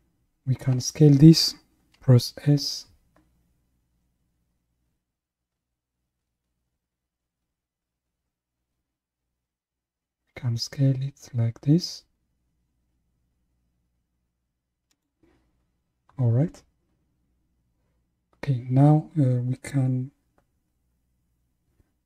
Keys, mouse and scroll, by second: 2.6 s.